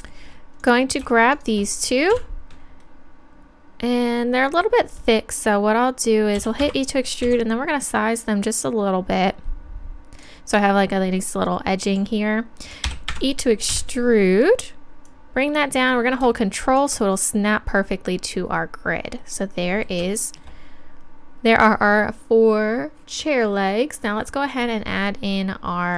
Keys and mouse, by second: 0.6-2.1 right drag, 7.2 s, 10.2-11.8 drag, 12.9 e, 13.7 KP_3, 15.1-16.8 drag.